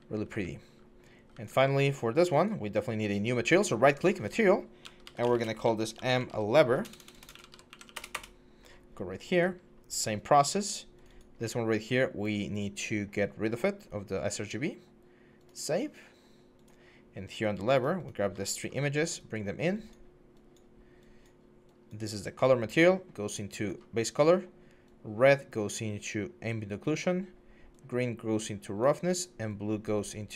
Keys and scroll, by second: 0.0-1.1 typing, 4.8-7.8 typing, 7.8 Return, 7.9 Return.